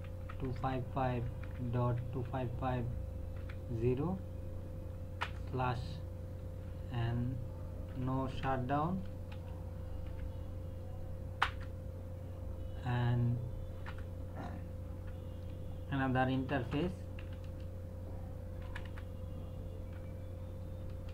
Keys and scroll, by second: 0.0-2.3 typing, 3.4 KP_0, 5.2 Return, 7.9-10.1 typing, 11.4 Return, 13.8 Return, 16.3-17.4 typing, 18.6 BackSpace, 19.9-21.1 typing.